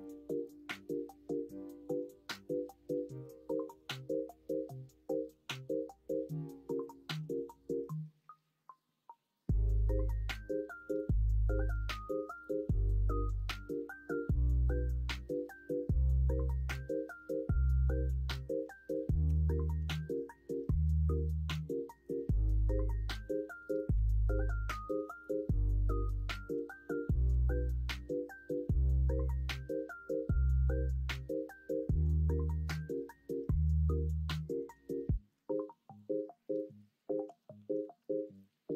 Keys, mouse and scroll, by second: 17.5 1, 19.2 g, 22.1 ctrl+z, 23.9 1, 26.5 ctrl+b, 29.1 ctrl+z, 32.2 shift+middle click, 35.4 ctrl+r, 37.2 ctrl+z, 37.9 ctrl+r.